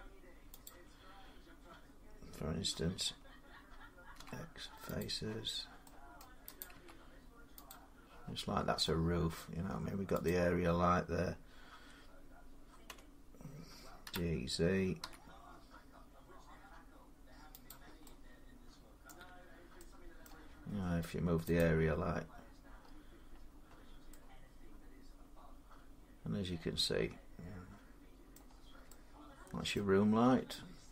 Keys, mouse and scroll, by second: 0.4 click, 3.9 x, 4.8 click, 5.6 scroll up 1, 6.0 middle click, 6.4 click, 6.5 x, 7.5 click, 8.6 middle click, 10.1 click, 12.7 Tab, 13.8-14.8 typing, 13.9-15.1 drag, 17.5 click, 18.9 middle click, 20.0 middle click, 22.5 click, 22.6-23.4 scroll up 7, 23.4 scroll down 1, 28.1 middle click, 28.3 scroll down 4, 29.5 middle click, 29.8-30.5 scroll up 7, 30.7 middle click.